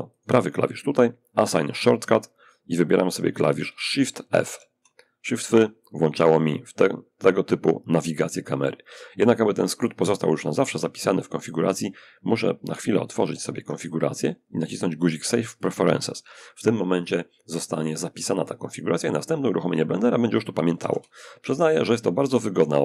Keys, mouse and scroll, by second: 1.4 click, 3.7 shift+f, 12.4 ctrl+alt+u, 14.9 click, 17.2 click, 20.0 shift+f, 21.0 a, 21.3 a.